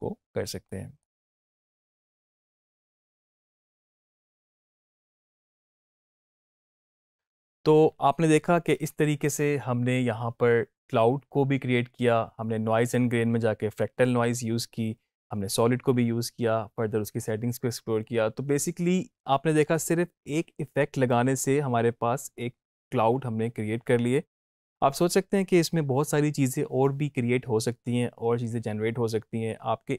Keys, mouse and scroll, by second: 0.6-1.2 click, 1.1 space.